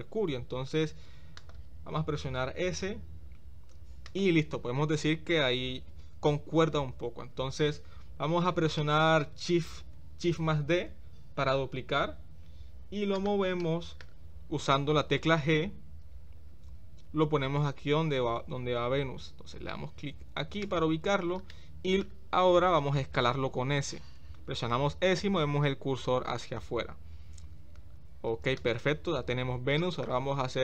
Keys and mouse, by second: 2.3 s, 8.9-9.2 shift+middle drag, 10.8 shift+d, 13.6-14.0 shift+middle drag, 16.3 g, 21.6-22.0 shift+middle drag, 24.1 s, 29.8 shift+middle drag.